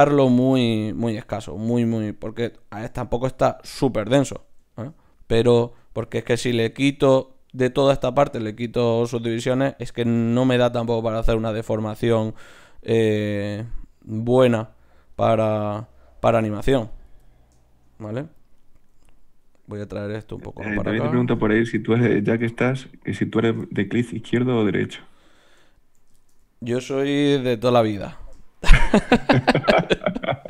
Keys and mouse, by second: 2.3-5.9 middle drag, 18.9 g, 21.2 shift+q, 23.3 click, 27.2 shift+q.